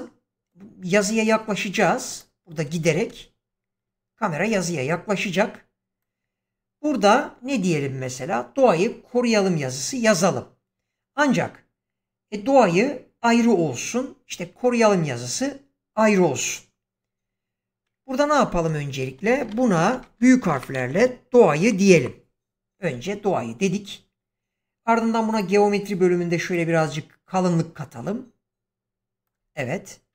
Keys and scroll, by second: 3.0 space, 18.6 Tab, 19.1 BackSpace, 20.0 Caps_Lock, 20.4-21.9 typing, 22.9 Tab.